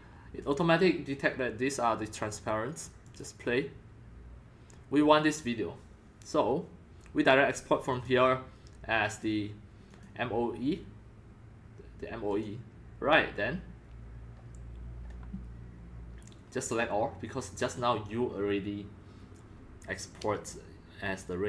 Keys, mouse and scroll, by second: 3.0 click, 3.6-6.2 drag, 6.6-8.8 drag, 9.1 click, 9.9 click, 12.3 click, 14.0-17.6 drag.